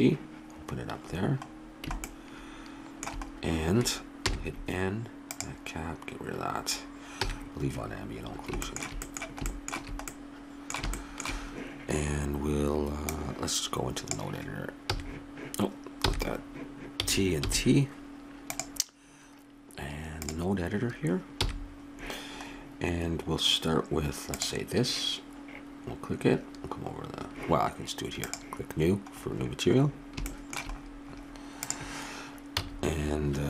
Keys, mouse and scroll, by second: 1.8-4.2 middle drag, 4.2 n, 5.3-7.2 drag, 7.2 n, 7.7 middle click, 13.0 click, 17.0 n, 17.0 t, 17.5 t, 18.4-20.3 drag, 21.4 n, 24.4-26.1 drag, 28.2-30.0 drag, 31.6-32.9 drag, 31.6 right click, 32.6 x.